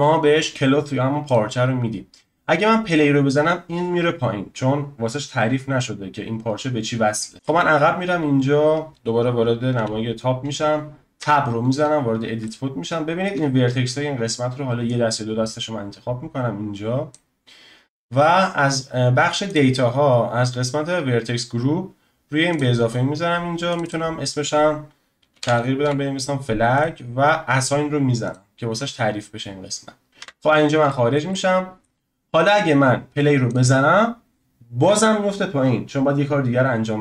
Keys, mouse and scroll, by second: 1.2-5.9 drag, 7.3-9.7 drag, 9.7 KP_7, 11.2 Tab, 12.0-12.4 scroll up 2, 12.4-14.8 shift+middle drag, 14.8 click, 19.5 click, 22.5-23.7 drag, 23.8-26.8 drag, 28.2 click, 30.2 Tab, 30.5-30.9 scroll down 3, 30.9-33.5 shift+middle drag, 33.5 click.